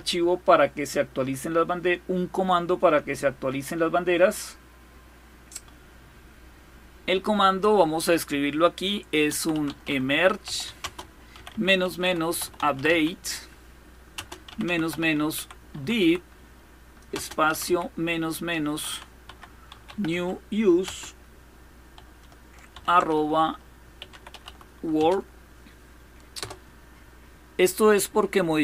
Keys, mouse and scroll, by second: 1.0 scroll down 2, 1.6-2.0 scroll down 2, 3.1-3.7 scroll down 2, 4.1-4.7 scroll down 2, 7.8 click, 8.6-20.5 typing, 22.4-24.6 typing, 25.8-26.5 typing.